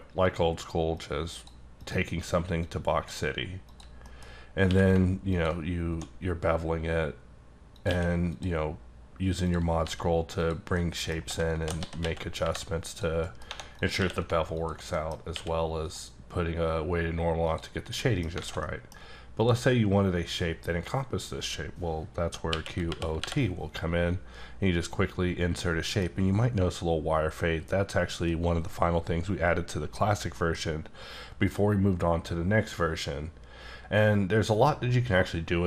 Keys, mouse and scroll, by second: 0.2 click, 0.9 click, 1.8 click, 2.6 click, 3.7 click, 4.2-4.7 scroll up 4, 4.7 q, 5.3 ctrl+click, 5.9 1, 7.7 click, 7.9 q, 8.3 click, 9.0-9.5 scroll down 1, 9.5 click, 9.8 g, 10.7 middle click, 11.8 s, 12.0 x, 12.4 y, 12.9 click, 13.2 middle click, 13.5 1, 13.8 click, 14.0 q, 14.5 alt+click, 14.9 middle click, 15.1 scroll up 2, 15.3 q, 15.8 click, 17.4 click, 17.7 scroll down 5, 18.0 middle click, 18.4 alt+a, 18.6 middle click, 19.4 click, 22.5 q, 22.9 o, 23.2 t, 25.6 t, 25.9 middle click, 30.3 F9.